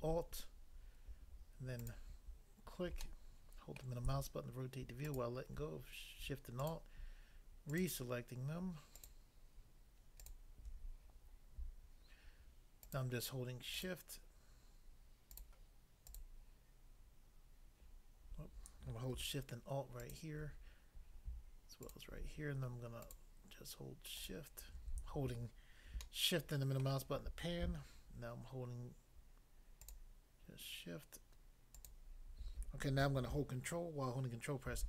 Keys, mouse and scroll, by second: 1.8 alt+click, 3.1 middle click, 3.8 middle click, 5.0 alt+click, 6.6 alt+click, 7.7 alt+click, 12.9 shift+click, 13.0 shift+click, 13.7 shift+click, 13.8 shift+click, 15.3 shift+click, 15.4 shift+click, 16.1 shift+click, 20.0 alt+click, 20.1 alt+click, 21.9 alt+click, 23.0 shift+click, 24.2 shift+click, 26.1 shift+middle click, 29.9 shift+click, 30.0 shift+click, 31.7 shift+click, 34.7 ctrl+e.